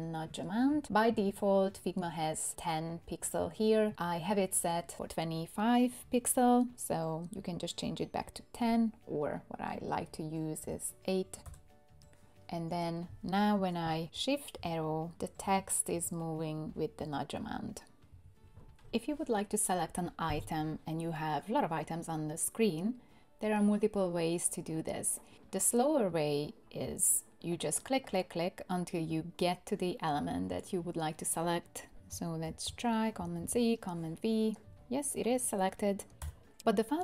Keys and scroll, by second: 10.6 8, 11.4 Return, 14.6 shift+Right, 15.1 shift+Right, 32.5 super+c, 33.4 super+v, 36.2 BackSpace.